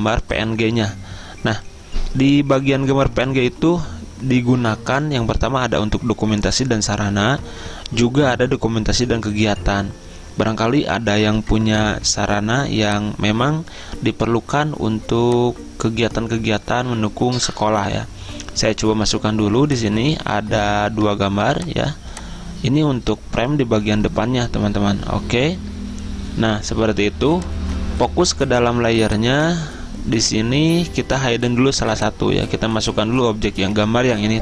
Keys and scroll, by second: 24.5 Return, 25.7 Return.